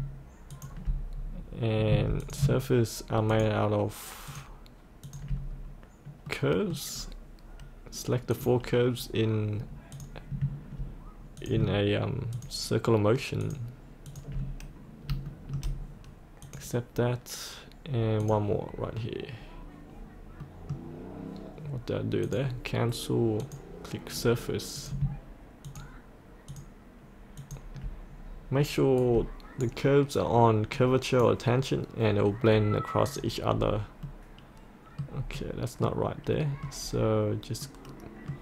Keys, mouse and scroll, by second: 0.5 ctrl+click, 1.2-1.9 scroll down 1, 2.2 click, 3.3 ctrl+click, 4.3 ctrl+click, 5.1 ctrl+click, 5.5-6.4 scroll up 1, 6.4 middle click, 7.0-8.3 scroll down 1, 8.3 click, 11.5 click, 12.4 ctrl+click, 13.5 ctrl+click, 14.1 ctrl+click, 15.3 shift+middle click, 16.5 click, 20.4 middle click, 22.3 click, 25.7 ctrl+click, 26.5 ctrl+click, 27.4 ctrl+click, 29.0-30.2 right drag, 30.8-32.2 drag, 32.3 click, 33.6 scroll up 1, 34.4 middle click, 36.8-37.6 scroll down 1, 37.6 middle click.